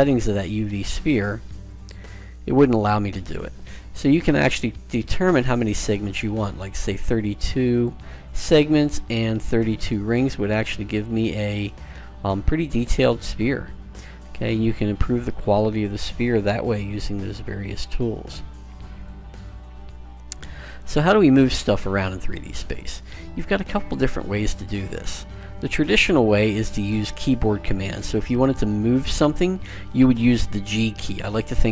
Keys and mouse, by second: 0.8-2.8 middle drag, 2.1 KP_Decimal, 4.7 click, 5.6 click, 5.7 click, 9.0 click, 13.5-15.4 middle drag, 21.0-23.4 middle drag, 23.8 middle click, 24.9-26.8 middle drag.